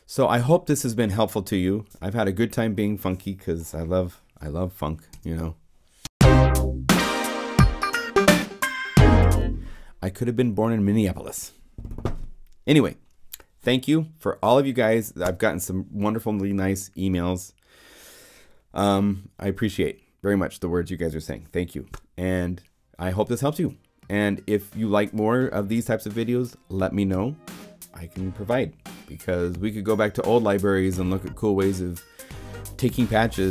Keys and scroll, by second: 5.1 0, 6.0 Return, 9.1 0.